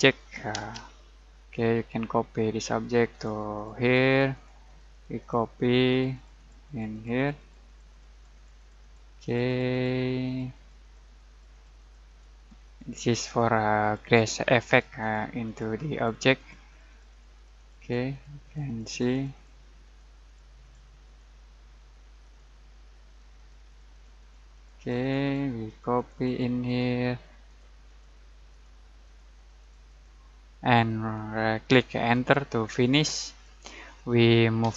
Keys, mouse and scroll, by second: 0.6 alt+space, 0.8-1.2 alt+scroll down 1, 1.2-2.1 alt+middle click, 1.8 alt+middle click, 2.2 alt+scroll down 1, 2.6 alt+middle click, 3.2 alt+click, 30.9 alt+right click, 32.1 alt+click, 33.0-33.6 alt+middle click, 33.5 alt+scroll up 1, 34.6 alt+m.